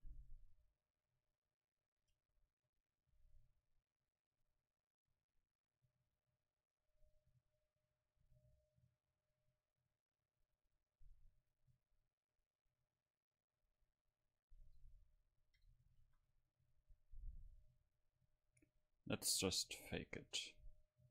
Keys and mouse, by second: 0.8-2.5 middle drag, 8.3 Tab, 14.7-16.6 drag, 16.1 shift+a.